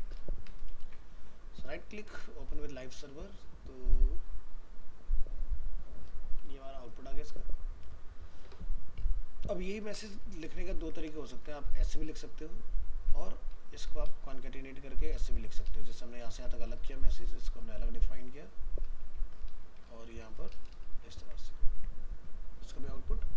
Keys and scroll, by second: 0.8 ctrl+s, 10.8 ctrl+c, 11.2 ctrl+Return, 11.3 ctrl+v, 21.2 ctrl+s, 21.7 alt+Tab.